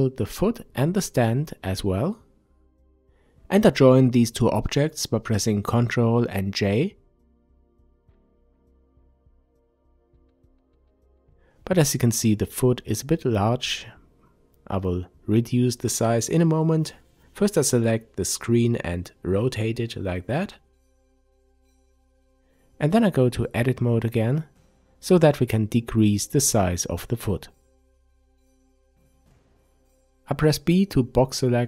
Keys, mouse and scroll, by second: 1.4 shift+click, 3.4 ctrl+j, 5.9-10.0 drag, 9.0 Return, 10.0-15.9 middle drag, 12.5 KP_5, 15.9 click, 16.7 r, 18.5 click, 18.7 scroll down 1, 19.0-20.1 middle drag, 20.1 click, 20.6 Tab, 22.1-28.3 middle drag, 23.5 KP_5, 25.9 a, 28.3 click, 29.5 b.